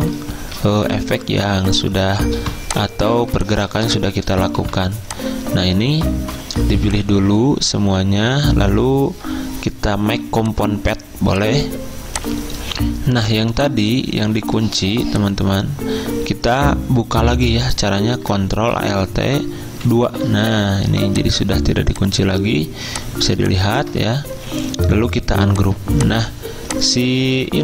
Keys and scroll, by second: 2.4 v, 3.2 z, 4.6 v, 14.4 ctrl+z, 20.0 ctrl+alt+2, 24.1 ctrl+z, 26.9 ctrl+z, 27.4 ctrl+z.